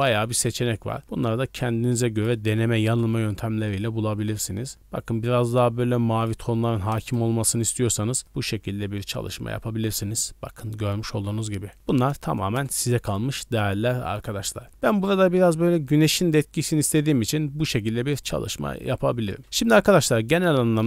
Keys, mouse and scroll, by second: 1.0-2.0 drag, 2.1 click, 3.8-6.3 drag, 7.0 KP_0, 8.2-12.6 drag, 17.0-17.3 scroll down 1.